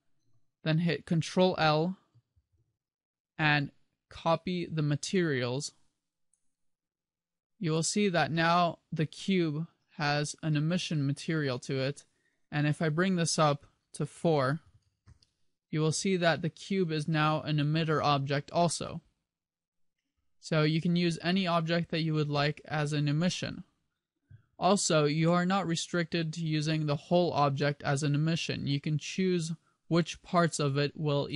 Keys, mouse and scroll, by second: 2.5 ctrl+l, 7.9 right click, 12.7 click, 25.4 middle click.